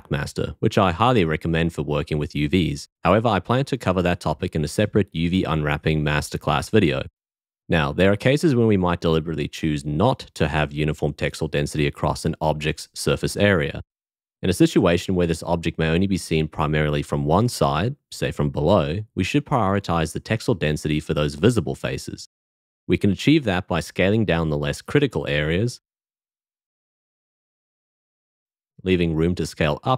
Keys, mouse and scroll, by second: 22.3 l, 27.1 s.